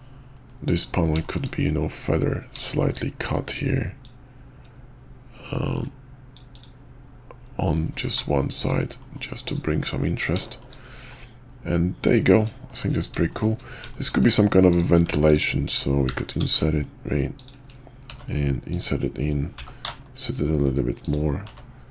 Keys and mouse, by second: 0.3 KP_5, 0.7 click, 1.2 shift+drag, 2.6 shift+click, 4.0-6.6 drag, 7.9 q, 9.0 middle click, 9.4 click, 9.8 KP_5, 10.4 shift+middle drag, 11.1-12.4 middle drag, 12.7 shift+middle click, 13.3 shift+middle click, 13.9 shift+middle drag, 14.7 click, 14.9 Tab, 15.2 click, 16.0 i, 18.1 e, 19.5 i, 21.4 e.